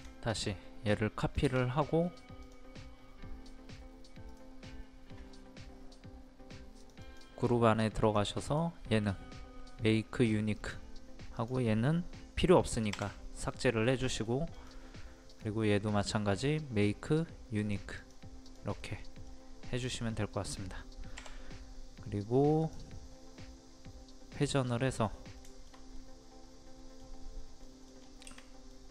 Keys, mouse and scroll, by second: 1.7 scroll up 1, 2.4 click, 4.3 right click, 6.8 click, 7.4-8.0 scroll up 1, 8.0 click, 8.5 right click, 10.6 click, 12.9 Delete, 14.0 middle click, 14.5 click, 15.3 right click, 17.6 click, 18.8-20.6 middle drag, 20.6-21.2 scroll down 1, 22.6 click, 24.7-27.2 middle drag, 27.9 scroll down 1, 28.7 middle click.